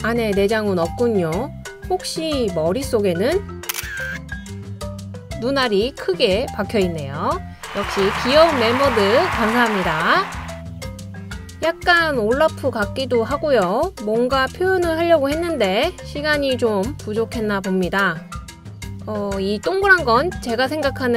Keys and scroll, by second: 0.6-1.1 typing, 2.2 typing, 3.6-5.1 typing, 7.9-8.7 typing, 10.6 typing.